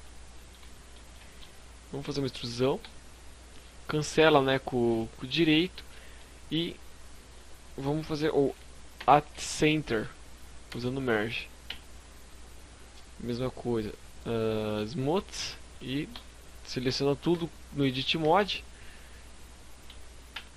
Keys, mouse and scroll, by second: 0.1 middle click, 1.8 e, 2.1 right click, 7.9 alt+m, 10.7 Tab, 10.8 scroll down 2, 12.6 scroll down 8, 13.8 click, 14.2-14.8 scroll up 3, 14.7 middle click, 15.1 Tab, 16.3 a, 17.3 a, 19.5 ctrl+m.